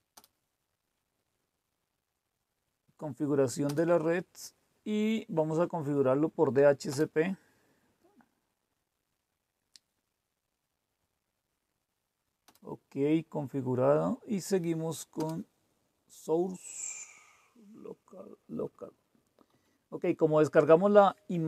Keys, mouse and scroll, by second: 0.2 Return, 6.9 Return, 12.5 Return, 15.2 Return, 18.9 Down, 19.1-19.4 typing.